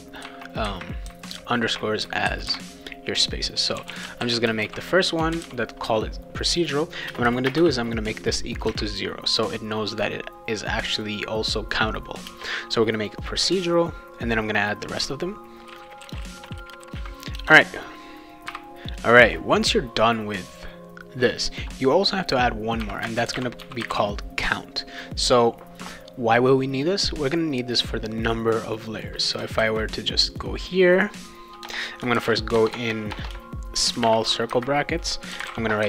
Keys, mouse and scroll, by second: 3.5-5.9 typing, 7.1 space, 7.2 =, 7.5 space, 7.6 0, 8.6 ,, 12.3 space, 15.4-17.4 typing, 18.5 n, 22.6-24.4 typing, 28.8 click, 29.0 click, 29.6 ctrl+c, 30.3 click, 31.6-35.8 typing.